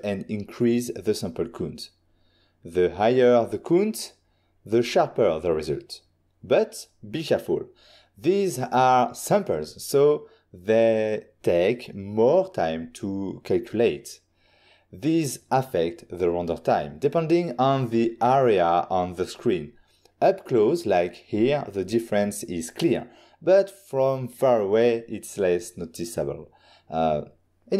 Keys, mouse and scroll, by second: 4.6 click, 5.6 typing, 6.5 Return, 13.6 ctrl+Tab, 14.7 ctrl+middle click, 18.7 ctrl+middle click, 23.2 shift+middle click, 27.2 ctrl+middle click.